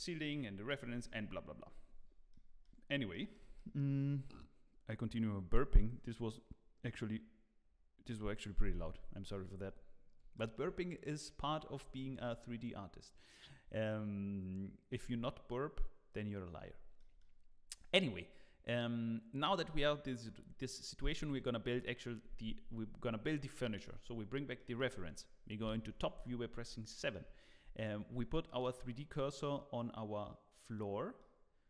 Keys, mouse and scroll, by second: 1.8 scroll down 1, 2.3 middle click, 3.1 middle click, 3.5 shift+middle click, 4.1-4.9 scroll up 1, 10.3 shift+middle click, 11.1 middle click, 11.9 shift+middle click, 17.0 middle click, 23.8 click, 24.4 scroll down 1, 24.5 middle click, 25.6 KP_7, 26.4 scroll up 2, 26.9 shift+middle click, 27.8 shift+right click, 28.4 middle click, 29.4 middle click, 31.2 middle click.